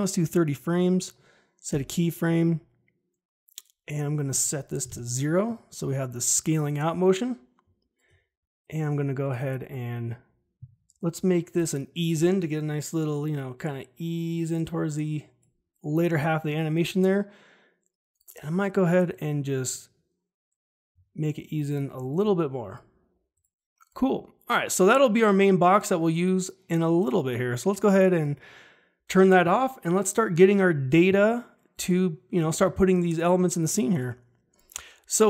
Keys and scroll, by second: 1.6 Home, 4.8 0, 4.8 Return.